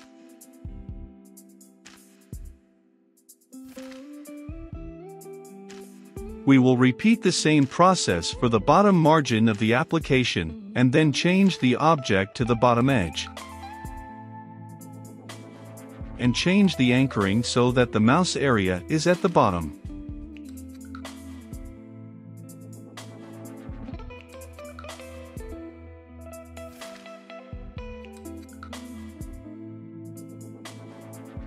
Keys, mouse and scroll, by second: 4.5 click, 5.4 Return, 6.3 ctrl+v, 8.5-9.7 drag, 9.6-11.2 typing, 12.7 click, 13.3-15.0 typing, 16.2-31.4 drag.